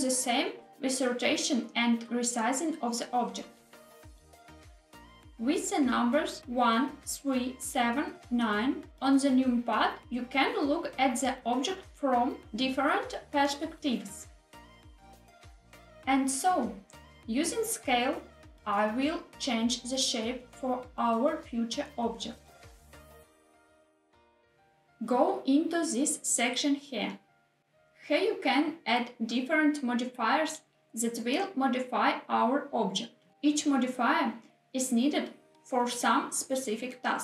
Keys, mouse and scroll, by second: 0.7 z, 3.1 click, 4.3 ctrl+z, 6.5 KP_1, 9.1 middle click, 10.6 KP_3, 14.6 KP_9, 16.5 s, 16.9 y, 17.7 click, 18.0 s, 18.3 z, 20.2 click, 21.7 g, 22.0 z, 23.6 click, 26.6 click, 29.9-37.2 drag.